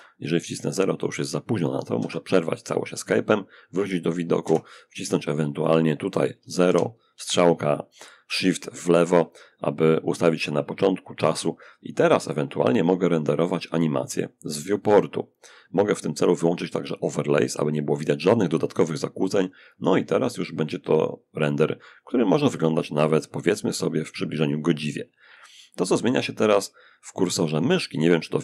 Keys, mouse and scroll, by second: 1.2 Escape, 3.6 0, 5.8 shift+Left, 11.7 click, 16.0 click, 19.3 click, 20.6 click.